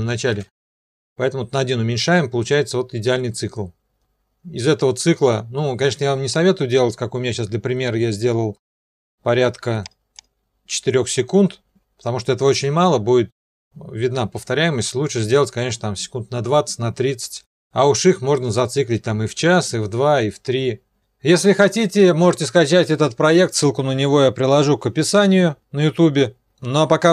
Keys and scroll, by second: 0.3 0, 5.8 0.